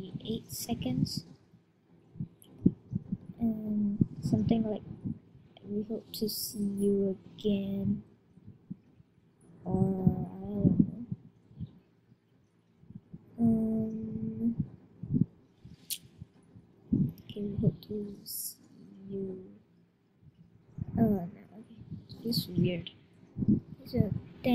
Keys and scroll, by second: 0.3 typing, 1.8-2.5 typing, 17.2 shift+w, 24.3 shift+t.